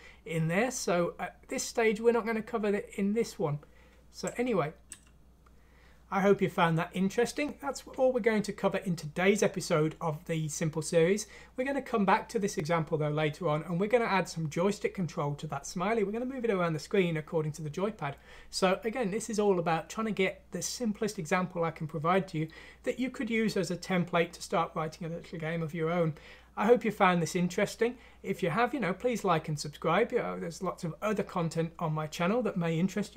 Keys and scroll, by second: 4.5 ctrl+alt+!.